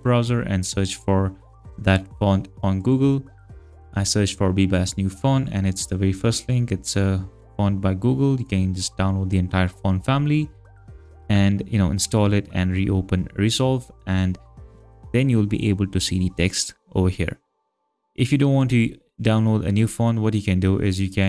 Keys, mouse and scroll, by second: 2.8 click, 8.4 click, 10.8 click, 21.2 click.